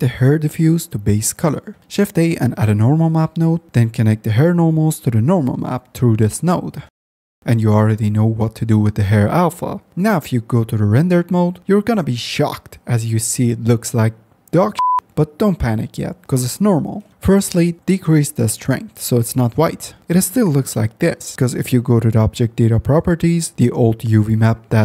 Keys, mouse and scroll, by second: 1.8 shift+a, 4.7-5.5 drag, 6.3-7.4 drag, 9.3 click, 9.9-11.5 drag, 12.4 z, 14.9 middle click, 16.0-17.1 drag, 20.6 click, 21.4-22.5 drag, 24.1 Tab.